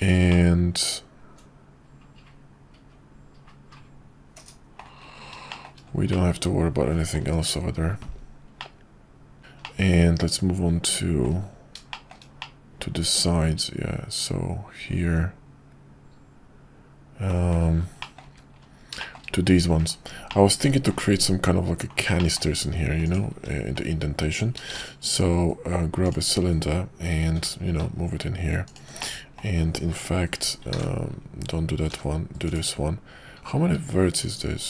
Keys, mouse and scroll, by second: 0.3-4.8 middle drag, 5.5 shift+middle drag, 6.2-7.1 middle drag, 8.6-9.4 middle drag, 9.7-11.2 middle drag, 11.9 shift+middle drag, 12.4-17.3 middle drag, 18.0 middle click, 19.0 shift+middle drag, 20.2-21.0 middle drag, 22.2 middle drag, 23.0 click, 24.7 shift+a, 27.3 g, 29.2 middle click, 30.8 ctrl+z, 31.9 g.